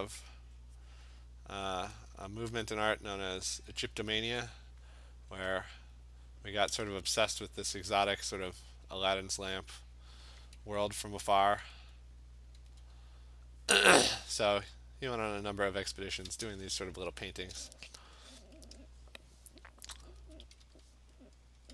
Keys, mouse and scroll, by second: 2.2 alt+click, 3.6 alt+click, 5.7 click, 6.3 click, 6.7 alt+click, 6.7 ], 7.6 click, 9.5 click, 10.0 click, 10.9 ], 11.4 ], 12.5 click, 12.8 click, 13.4 alt+click, 13.5 alt+click, 13.7 click, 14.3 [, 14.6 [, 15.3 click, 17.5-19.8 click, 20.2 alt+click, 20.5 ], 20.7 ], 20.8-21.7 ].